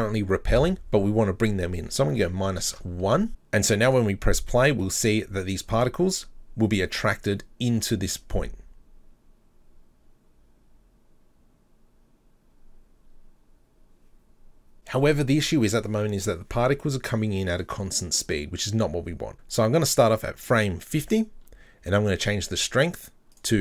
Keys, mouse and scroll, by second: 0.6-3.3 drag, 3.9-4.3 drag, 4.5-5.7 middle drag, 5.7-7.1 scroll up 4, 14.7 click, 19.3 click, 20.1 click, 23.3-23.6 drag.